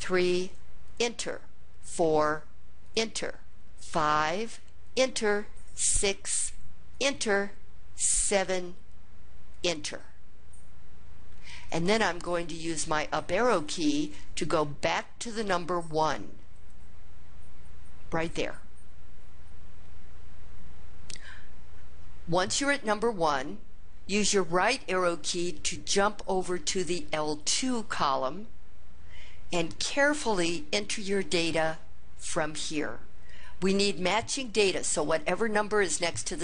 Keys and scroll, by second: 0.7 Return, 1.6 4, 2.7 Return, 3.6 5, 4.6 Return, 5.7 6, 6.7 Return, 8.0 7, 9.3 Return, 13.3 Up, 13.7 Up, 14.2 Up, 14.7 Up, 15.1 Up, 15.7 Up, 16.3 Up, 26.1 ).